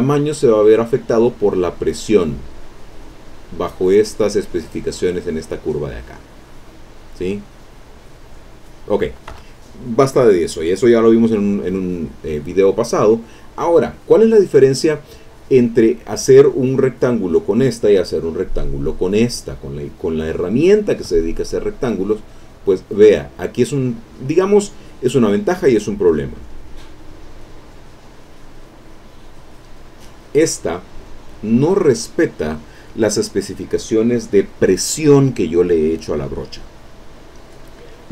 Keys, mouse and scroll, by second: 6.3 click, 7.3-8.3 drag, 9.3 Escape, 10.8-12.4 middle drag, 18.5 click, 19.1 click, 22.3-26.3 drag, 28.0 click, 29.6 click, 30.9 click.